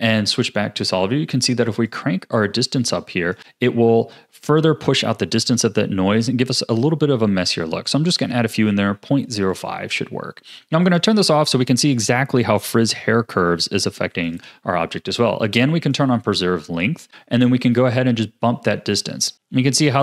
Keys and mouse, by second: 0.1 z, 1.9-3.3 drag, 9.5 click, 10.8 click, 12.6 click, 14.2 click, 15.8 click, 17.8-20.0 shift+drag.